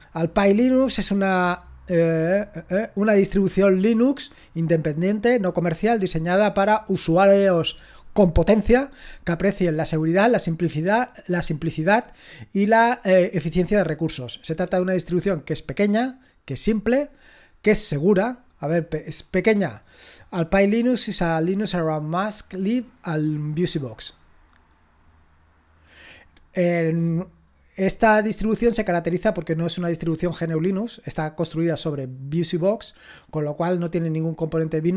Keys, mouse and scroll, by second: 17.1-17.9 scroll down 2, 17.9-21.1 scroll down 1.